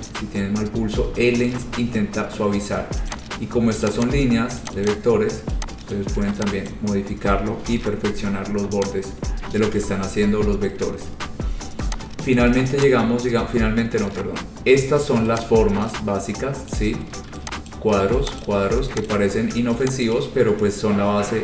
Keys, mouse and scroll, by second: 0.4 click, 1.3 ctrl+z, 1.7 ctrl+z, 2.3 scroll, 3.3 click, 4.0 click, 4.2 click, 4.5 scroll, 4.9 click, 5.0 click, 6.1 click, 6.9 click, 7.8 Delete, 9.0 click, 9.3 scroll, 9.9 Delete, 10.7-11.1 scroll, 12.5 click, 13.0 click, 16.9 click, 17.9 ctrl+click, 18.0 ctrl+click, 18.6 click, 19.3 click, 20.2 click, 20.8-21.4 scroll.